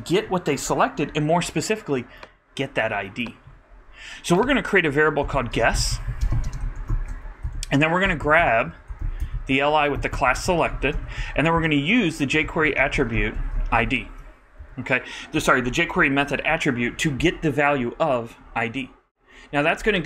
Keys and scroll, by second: 6.5-7.9 typing, 11.3 super+d, 11.5 super+Right, 12.3 super+., 12.8-13.8 typing, 14.0 super+Right, 14.6 super+;.